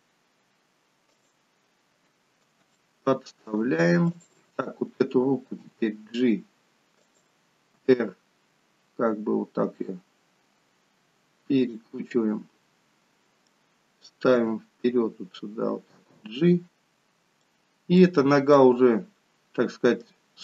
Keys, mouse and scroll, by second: 2.8 shift+middle click, 4.1 click, 5.5 g, 7.8 r, 12.1 middle click, 14.4 g, 17.5 middle click, 18.7 middle click.